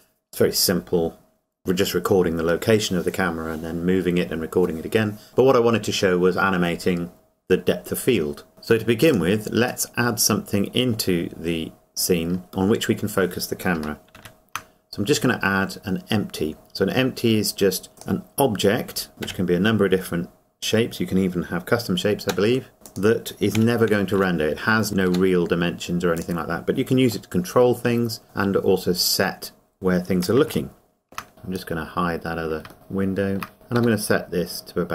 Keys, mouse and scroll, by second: 9.1 click, 9.9 middle click, 11.1 scroll down 1, 17.9 click, 19.2 KP_7, 20.1-22.1 scroll down 1, 22.2 g, 22.8 g, 22.9 click, 23.6 KP_Decimal, 25.1 g, 26.3 click, 27.3 middle click, 28.9-30.5 scroll up 1, 30.7 shift+middle click, 31.3 click, 32.7 shift+middle click, 34.1 g.